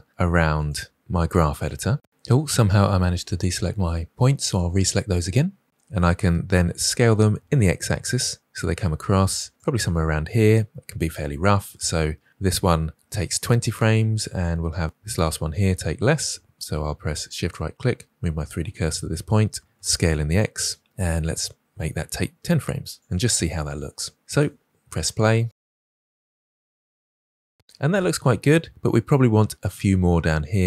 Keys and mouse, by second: 0.5 shift+click, 2.1-3.1 drag, 3.4 shift+drag, 4.7-5.0 shift+drag, 6.8 s, 14.5-15.3 drag, 17.2 shift+click, 19.7 s, 24.3 space, 28.7 space.